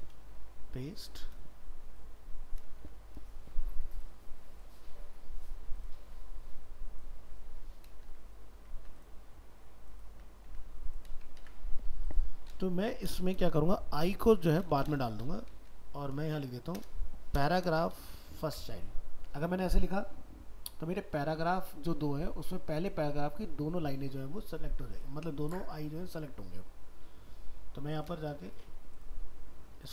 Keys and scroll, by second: 11.4 ctrl+s, 18.5 ctrl+s.